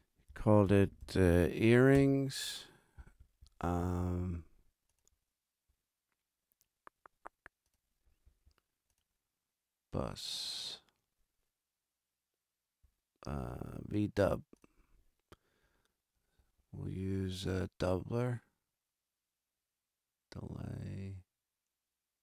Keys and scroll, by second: 0.6 shift+d, 1.1 shift+l, 1.9 shift+Return, 2.4 Return.